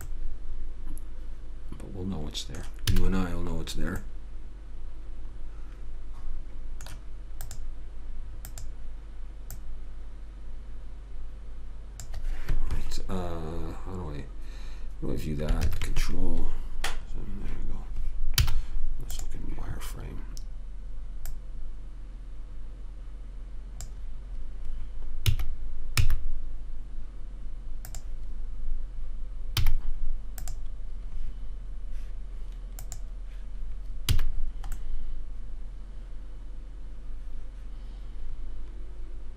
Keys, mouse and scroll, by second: 0.7-2.2 middle drag, 3.3 a, 4.4-6.1 middle drag, 7.8-11.5 drag, 18.7 z, 25.6 s, 30.0 z, 33.1 click, 34.5 a, 35.1 middle click.